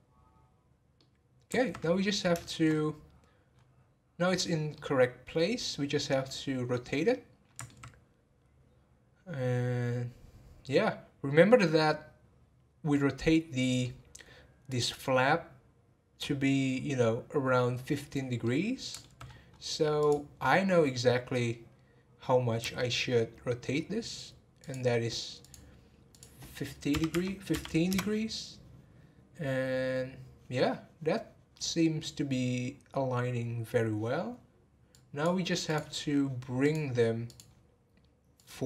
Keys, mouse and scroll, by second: 1.8-2.4 scroll up 2, 2.4 shift+middle click, 2.6-3.5 scroll up 1, 3.5-4.2 scroll up 9, 4.2-4.7 scroll down 1, 4.7-10.2 middle drag, 13.5 scroll down 3, 13.8-14.7 middle drag, 14.7 click, 18.4-19.2 middle drag, 19.2 scroll up 1, 20.0 click, 20.3 scroll up 1, 22.6 r, 25.4 click, 26.1-29.3 drag, 35.6-38.6 drag.